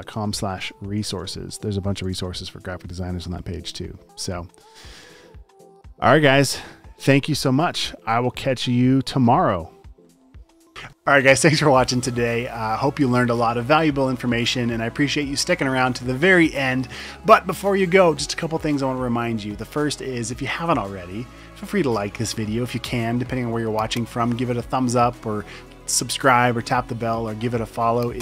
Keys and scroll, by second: 0.1-1.6 typing, 1.9 Right, 2.3 Return.